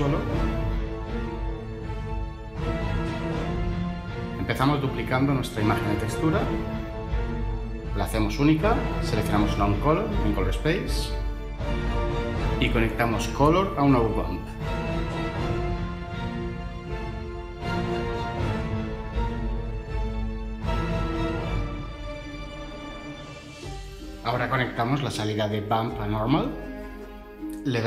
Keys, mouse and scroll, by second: 5.5 shift+d, 15.3-15.7 typing, 16.4 Down, 16.6 Down, 16.9 Return.